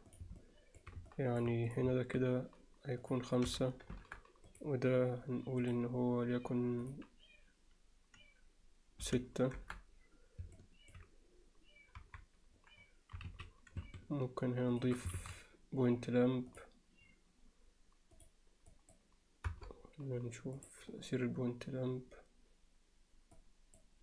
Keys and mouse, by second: 0.1 drag, 0.4-0.8 middle drag, 1.1-1.4 alt+middle drag, 3.0 click, 4.5 click, 5.6 click, 6.9-9.7 drag, 10.6-10.9 alt+middle drag, 12.0 KP_3, 13.3 z, 15.2 shift+a, 18.2 click, 19.5 KP_0, 23.4 click.